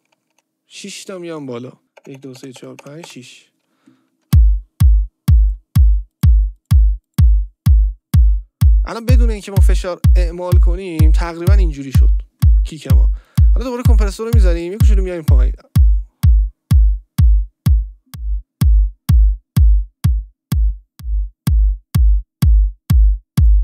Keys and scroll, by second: 1.8 ctrl+z, 2.0 Up, 4.2 space.